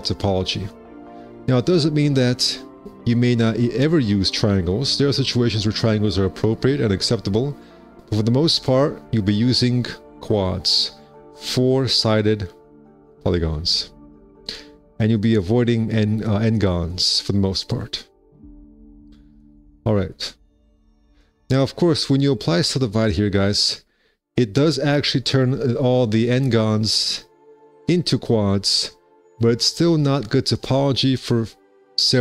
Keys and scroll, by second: 28.2 space.